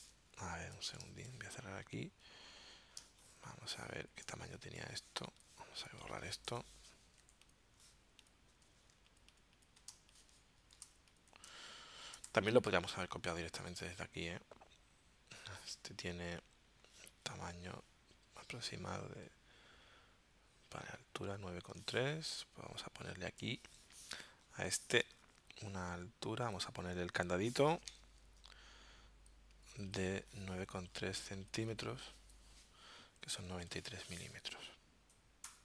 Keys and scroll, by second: 1.1 super+w, 3.0 space, 6.5 BackSpace, 7.2 z, 10.0 space, 11.4 space, 27.9 alt+super+0.